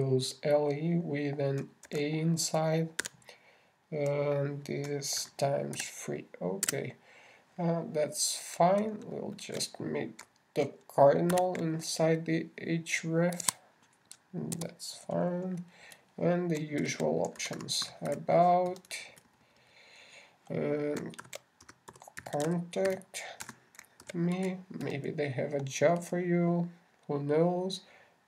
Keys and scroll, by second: 3.3 shift+<, 4.4 shift+a, 6.3 shift+Right, 6.6 shift+=, 7.2 shift+3, 10.4 ctrl+shift+Down, 12.7 shift+3, 18.0 shift+Left, 18.2 shift+a, 18.8 shift+b, 22.6 shift+c, 23.0 shift+o, 25.2 shift+space, 25.4 shift+m, 25.8 shift+e.